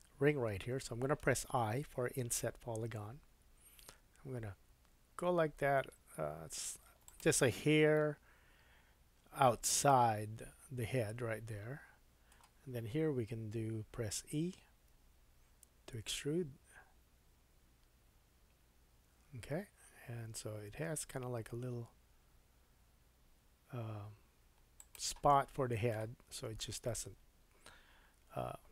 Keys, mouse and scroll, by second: 3.3 i, 9.9 middle click, 14.9 e, 25.3 middle click, 26.1 Tab, 26.5-26.9 scroll down 2, 26.9 middle click.